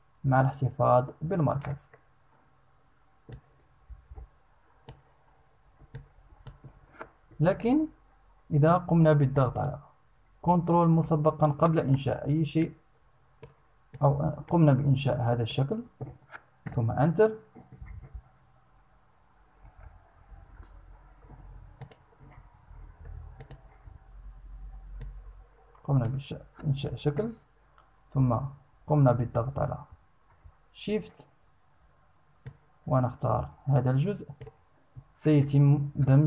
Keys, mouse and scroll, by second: 2.8-4.6 drag, 5.4 click, 6.8 Escape, 12.1 ctrl+click, 13.4-15.2 ctrl+drag, 16.2 Return, 19.8 ctrl+shift+a, 21.4 click, 23.0 click, 24.5-25.8 drag, 26.7 Return, 32.0-34.2 shift+drag, 35.9 Return.